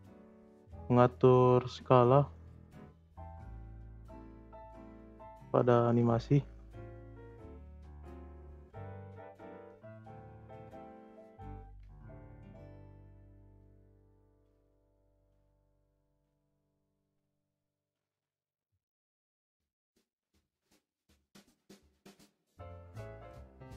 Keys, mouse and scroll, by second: 0.7-2.5 scroll down 2, 2.5-3.1 scroll up 2, 3.1-4.5 middle drag, 4.5-5.1 shift+scroll up 3, 5.3-5.9 middle drag, 5.9 shift+s, 6.8-7.3 shift+middle drag, 7.3 s, 10.7 click, 11.4 ctrl+c, 11.7 ctrl+v, 12.6-14.2 drag, 14.2 s, 15.8-16.3 drag, 16.3 space, 17.0 space, 17.5-18.1 drag, 18.3 scroll down 2, 18.5-19.5 middle drag, 19.5 click, 20.3 space, 21.5 space.